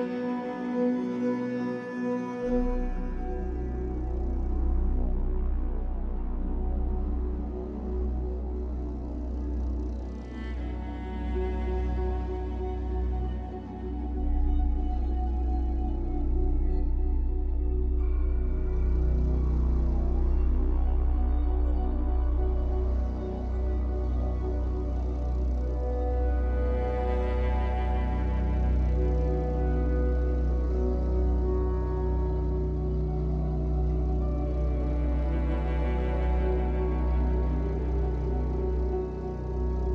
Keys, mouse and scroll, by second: 4.7-11.5 shift+drag, 11.3 scroll down 1, 11.5-13.4 shift+middle drag, 12.6-13.4 scroll up 2, 13.4-17.7 shift+drag, 17.7-21.2 shift+middle drag, 18.3 scroll up 1, 21.2 click, 21.4-24.5 middle drag, 23.6 scroll down 1, 24.5 click, 24.7 scroll up 1, 24.9-26.6 middle drag, 25.8-26.2 scroll up 1, 26.2 f, 26.6 click, 27.3-28.8 drag, 28.6 scroll down 2, 28.8-38.9 middle drag, 30.4 scroll down 2, 31.3 ctrl+z, 37.6 scroll up 2, 38.9-39.9 shift+drag.